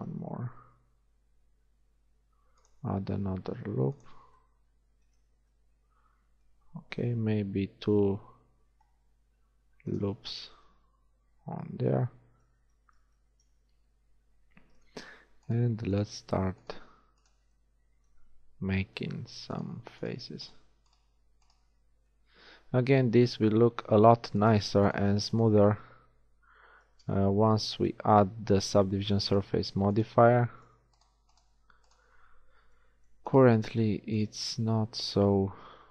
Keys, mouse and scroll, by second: 0.2 ctrl+r, 4.5 middle click, 7.2 ctrl+r, 16.4-18.9 right drag, 17.7-18.9 drag, 19.3 f, 19.7-22.0 shift+drag, 22.0 f, 24.5-25.8 right drag, 25.8 click, 26.4 middle click, 27.8 ctrl+r, 30.0 middle click, 32.8 shift+f.